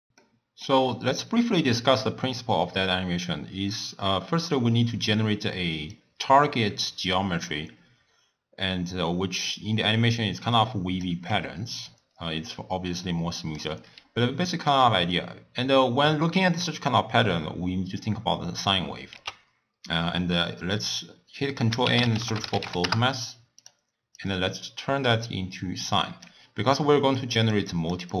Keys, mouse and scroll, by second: 0.2-0.8 middle drag, 0.8-1.2 scroll down 1, 1.2 scroll up 1, 1.2-2.0 scroll down 1, 2.6-5.9 d, 6.0-9.0 drag, 11.1-14.5 typing, 13.0-13.6 drag, 19.2 ctrl+a, 24.2-26.7 drag, 26.7-28.2 typing, 27.2 click, 27.7 click.